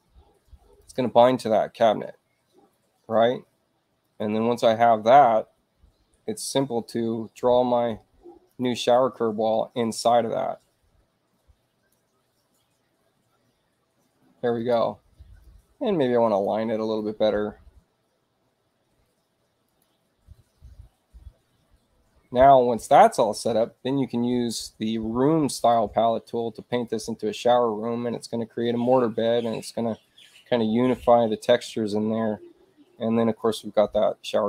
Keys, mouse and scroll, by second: 0.8 click, 4.0 click, 9.9-11.9 drag, 14.5 click, 15.4-16.4 drag, 19.6 click, 25.5 click, 26.7 click, 33.4 click.